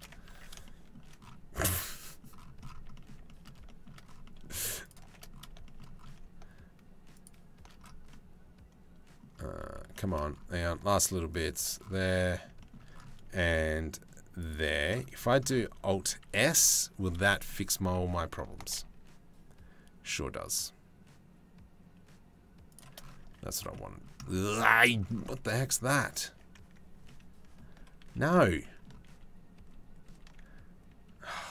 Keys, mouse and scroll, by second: 2.6 click, 3.1 click, 7.7-9.4 drag, 9.5 shift+click, 11.7 middle click, 12.3 shift+middle click, 15.5 shift+middle click, 17.0 shift+middle click, 18.2 alt+s, 22.9 Tab, 23.2 click, 23.4 click, 27.7 ctrl+z, 28.8 ctrl+z, 29.3 ctrl+z, 29.7 ctrl+z.